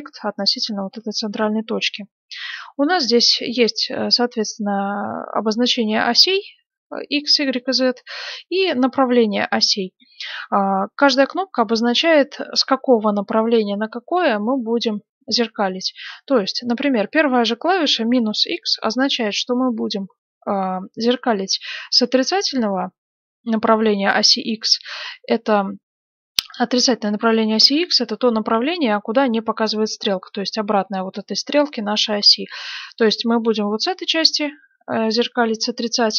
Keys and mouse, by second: 21.9-36.1 middle drag.